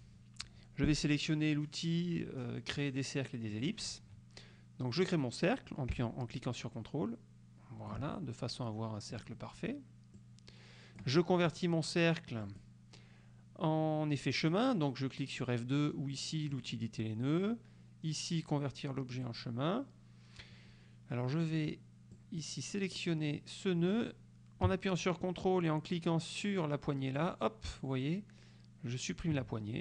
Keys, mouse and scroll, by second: 3.6 middle click, 6.1-8.2 ctrl+drag, 9.2 click, 10.2-11.2 drag, 12.5 click, 16.6 click, 19.3 click, 22.2 click, 27.3 ctrl+click.